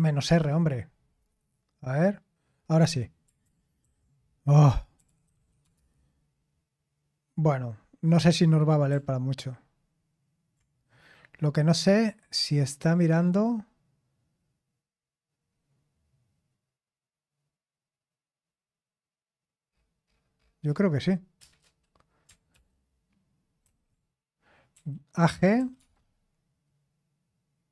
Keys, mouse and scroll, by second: 0.2 Return, 3.4 ctrl+p, 3.8 ctrl+a, 4.7-5.8 typing, 8.9 ctrl+p, 8.9 typing, 22.5 ctrl+p, 23.6 ctrl+c, 24.7-26.1 typing.